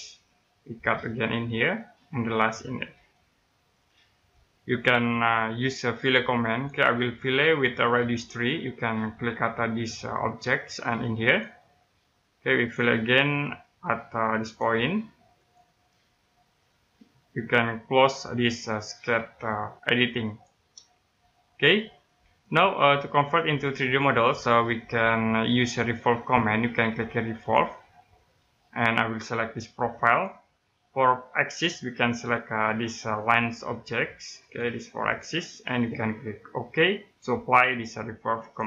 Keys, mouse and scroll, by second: 0.7 click, 1.6 middle click, 2.4 click, 3.4-3.7 scroll down 1, 3.7 middle click, 6.4 click, 7.2-8.3 scroll up 1, 10.2 click, 13.4 middle click, 14.4 click, 16.4 middle click, 20.2 click, 21.4-21.7 scroll down 1, 21.7 middle click, 25.2 scroll down 1, 25.4 middle click, 27.3 click, 30.0 click, 34.4 click, 38.4 click.